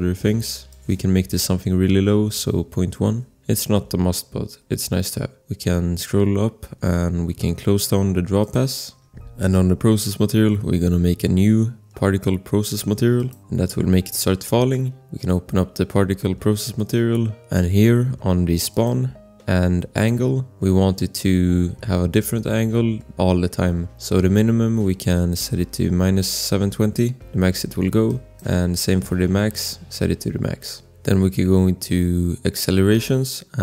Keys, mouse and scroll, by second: 0.4 click, 2.3 ., 2.7 1, 2.8 Return, 5.5 scroll, 8.4 click, 8.8-9.3 scroll, 9.3 click, 13.1 click, 15.1 click, 16.7 click, 17.1 click, 19.0 click, 24.3 click, 28.0 click, 31.2 scroll, 32.9 click.